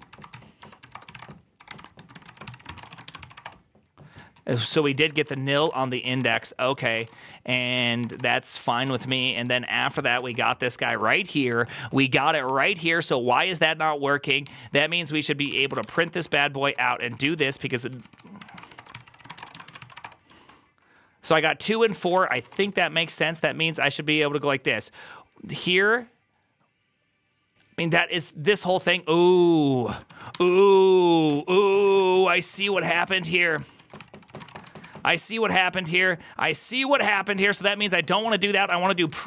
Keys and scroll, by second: 0.0-3.4 typing, 4.2 ctrl+a, 4.5-13.0 typing, 4.7 ctrl+c, 6.6 ctrl+c, 6.6 Return, 7.0 Return, 14.3-20.3 typing, 21.4-22.8 typing, 29.9 ctrl+a, 30.2 1, 30.3 ctrl+c, 30.5 ctrl+c, 31.1 ctrl+h, 31.5-35.8 typing, 37.1 typing, 38.2-39.2 typing.